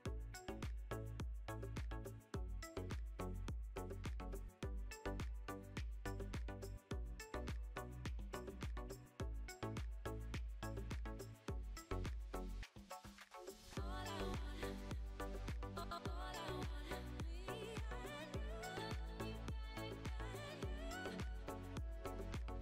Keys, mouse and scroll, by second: 0.4 Tab, 1.5 2, 1.9-3.4 drag, 3.4-4.8 shift+middle drag, 4.3-4.8 scroll up 1, 4.8 scroll up 3, 5.7 click, 7.5 click, 8.4 Tab, 8.6-9.3 drag, 9.3-9.9 shift+middle drag, 10.2-10.9 scroll down 5, 10.9-12.0 shift+middle drag, 12.0-12.5 scroll up 2, 12.5 click, 12.9-15.0 shift+middle drag, 15.0 alt+d, 18.3 scroll up 1, 18.8 alt+d.